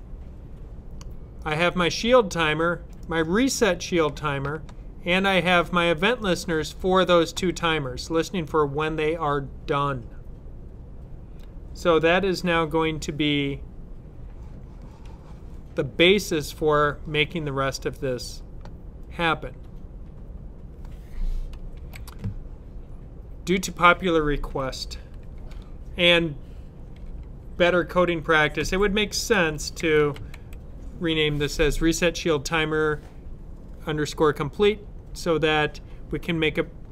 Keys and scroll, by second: 28.5-30.8 typing.